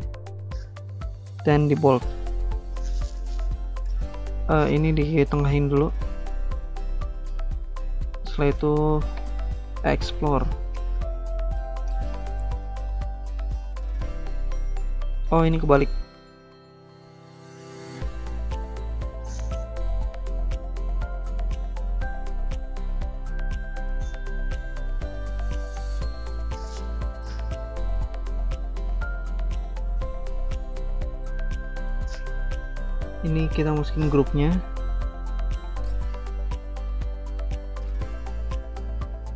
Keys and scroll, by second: 8.6-10.8 typing, 11.9 ctrl+c, 12.1 typing, 12.1 ctrl+v, 16.3 typing.